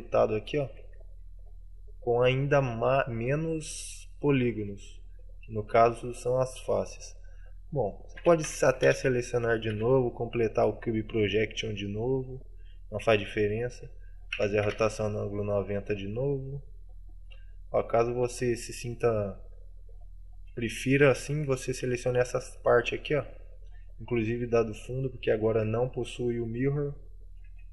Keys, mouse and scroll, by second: 0.1 middle click, 1.0 Tab, 1.0 middle click, 2.5 middle click, 5.3 click, 6.2 right click, 7.0 middle click, 8.3 a, 8.6 a.